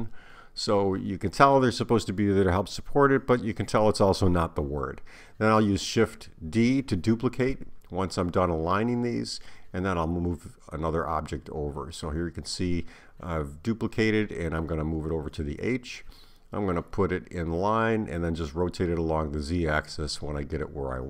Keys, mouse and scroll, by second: 5.5 r, 11.6 shift+d, 13.6 click, 15.7 click, 18.2 click, 20.4 r.